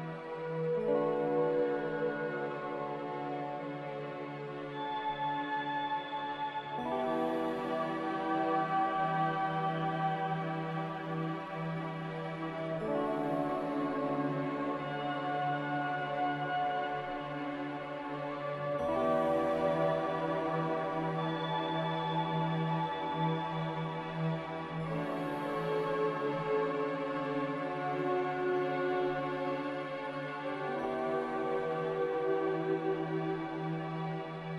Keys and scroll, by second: 8.3 3, 8.5 Return, 15.1 2, 15.1 r, 19.1 m, 19.7 a, 30.2-30.8 typing, 31.0 Return.